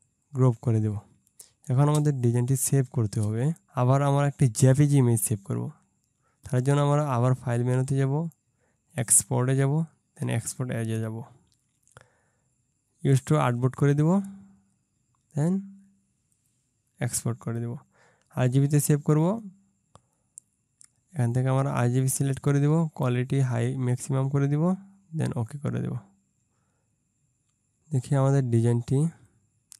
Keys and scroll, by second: 1.9 ctrl+space.